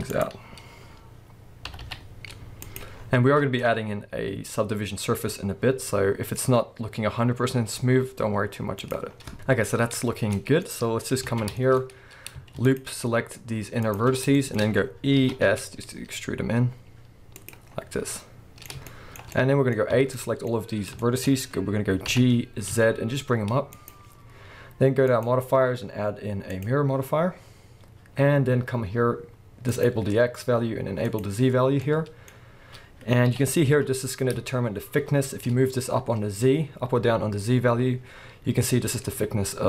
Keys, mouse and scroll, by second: 0.2 click, 1.7 g, 2.8 click, 2.9-3.6 scroll down 1, 3.6-6.4 middle drag, 6.4-8.0 scroll up 1, 8.0 s, 8.9 click, 9.1 scroll down 1, 9.3 middle click, 9.9-10.3 scroll down 1, 10.3 middle click, 10.7-11.3 scroll up 1, 11.3 alt+a, 11.6 shift+middle click, 11.8-12.4 scroll up 1, 12.6 alt+shift+click, 13.8 alt+shift+click, 14.1 scroll down 1, 14.3-17.5 shift+middle drag, 14.6-15.2 scroll up 2, 15.2 e, 17.5 click, 17.7-18.1 scroll down 1, 18.1-23.9 middle drag, 19.9 a, 20.5-21.0 scroll up 1, 22.1 g, 23.9 click, 25.1-29.8 drag, 31.0 click, 31.5 scroll down 1, 31.8-39.6 middle drag, 32.3-33.3 scroll up 2, 33.3 g.